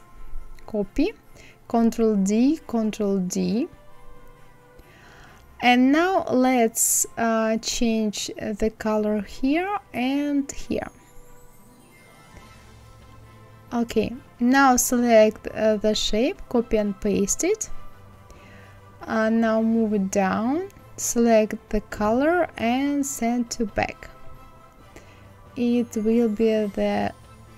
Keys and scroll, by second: 2.6 ctrl+d, 15.3 ctrl+c, 16.4 ctrl+f, 18.3 Right, 18.7 Down.